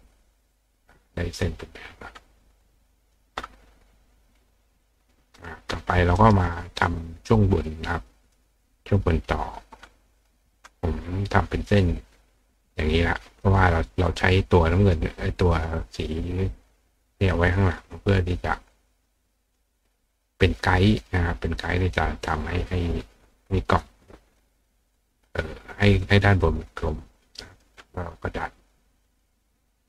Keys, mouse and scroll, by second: 0.7 click, 2.6 click, 3.2-4.9 middle drag, 4.9 click, 6.2 right click, 7.3-8.4 drag, 9.8 click, 10.2 click, 11.2 click, 12.2 click, 13.5 click, 14.8 click, 16.6 click, 18.0-19.6 drag, 20.3 click, 21.8 click, 22.7 click, 23.8 click, 25.1 click, 26.5-27.6 drag, 28.8 click.